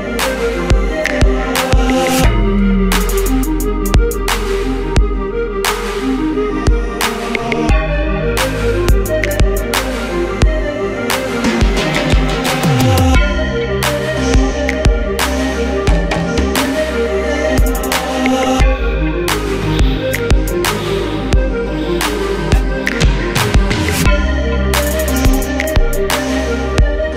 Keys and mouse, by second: 0.9 g, 3.5 g, 4.1 a, 5.3 click, 5.4 q, 5.8-7.3 drag, 7.3 g, 8.4 s, 8.8 middle click, 8.8 g, 9.7 q, 10.5 q, 12.5 z, 12.7 z, 14.0 a, 16.1-20.5 middle drag, 20.5 z, 20.8 Tab, 21.2 click, 21.3 ctrl+t, 21.7 middle click, 22.1 q, 22.5 Tab, 23.3 middle click, 24.6 a, 25.4 middle click, 25.4 s, 26.8 alt+m.